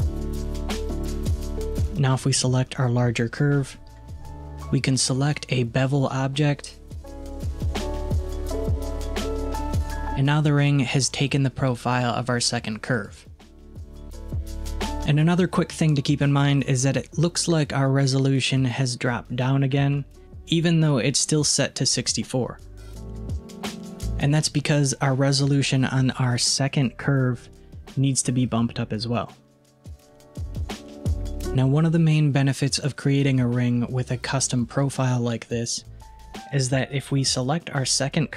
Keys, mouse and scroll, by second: 1.9 click, 5.9-8.9 drag, 13.0 click, 19.8 click, 20.2 scroll up 5, 25.4 click, 28.8-31.3 drag, 37.5 click.